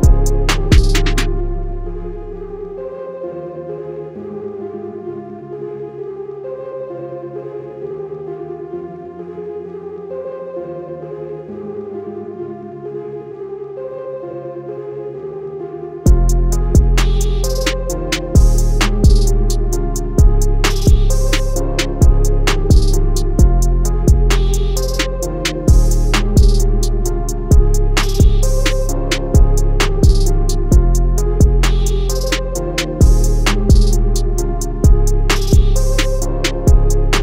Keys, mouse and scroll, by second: 0.4 scroll down 1, 1.5 ctrl+click, 2.0 ctrl+click, 3.3 ctrl+click, 3.8 ctrl+click, 6.3 ctrl+click, 6.7 click, 8.7 ctrl+click, 9.2 alt+scroll up 2, 10.0 ctrl+click, 10.3 click, 12.1 click, 13.3 scroll down 1, 13.8-14.3 scroll up 1, 14.5 scroll up 1, 15.2 scroll down 1, 15.5 scroll up 1, 16.3 ctrl+click, 17.4-18.3 alt+scroll down 2, 18.8 click, 20.6 click, 21.0 scroll up 1, 21.3 scroll down 1, 22.9 click, 29.9 click, 35.4 Escape, 36.1 click.